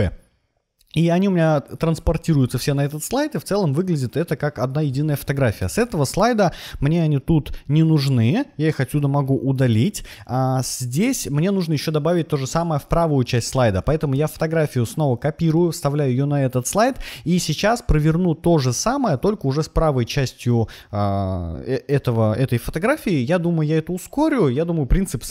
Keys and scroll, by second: 8.1 super+a, 8.4 BackSpace, 14.0 super+c, 15.4 super+v.